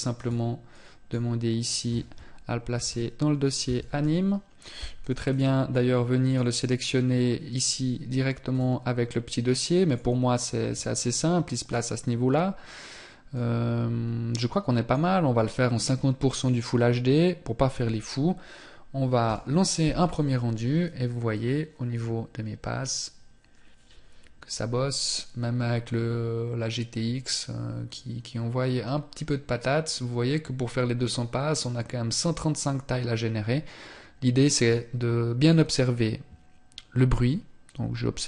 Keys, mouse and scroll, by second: 2.1 BackSpace, 7.9 click.